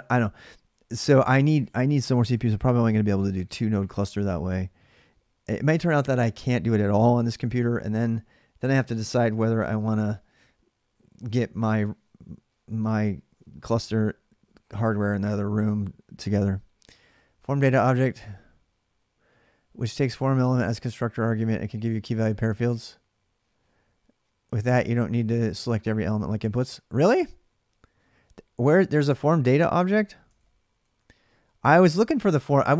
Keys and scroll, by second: 30.1 ctrl+[, 30.1 ctrl+j, 30.7 j.